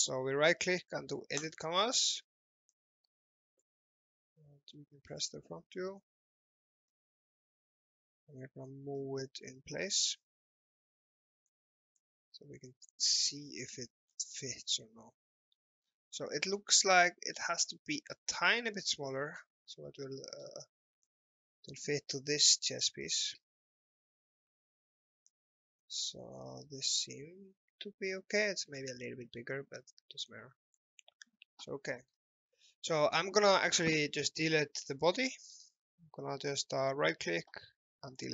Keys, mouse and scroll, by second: 1.4 click, 13.9 scroll up 1, 14.1 scroll down 1, 14.8 alt+middle click, 15.9-16.6 scroll up 1, 17.1-17.4 scroll down 1, 18.2 click, 19.4 scroll up 1, 20.0 middle click, 21.1 click, 31.8 alt+middle click, 32.6 shift+middle click, 35.0 click, 35.5 right click, 38.2 click.